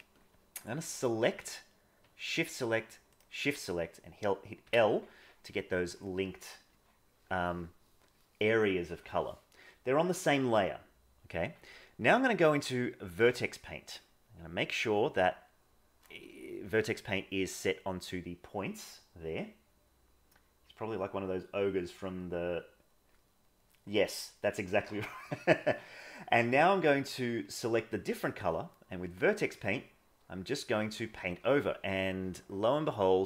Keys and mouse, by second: 0.9 click, 2.2 shift+click, 12.0-13.1 drag, 29.1-33.2 drag.